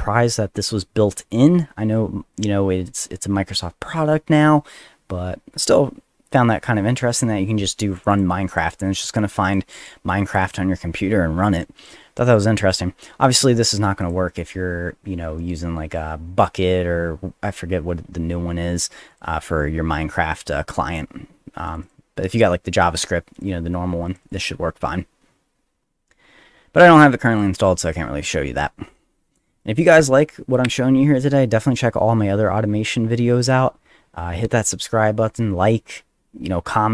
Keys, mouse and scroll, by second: 3.8 click, 7.9 click, 8.1 click, 8.5 click, 9.1 click, 9.8 click, 10.3 click, 10.4 click, 11.8 click, 13.2 click, 13.4 click, 14.0 click, 19.1 click, 21.7 click, 21.8 click, 23.3 click, 24.1 click, 24.2 click, 25.4 middle click, 27.3 click, 27.4 click, 28.9 click.